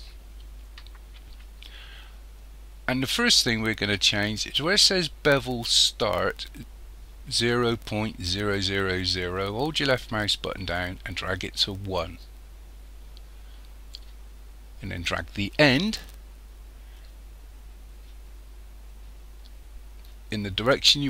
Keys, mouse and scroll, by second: 9.9 click, 17.0 click.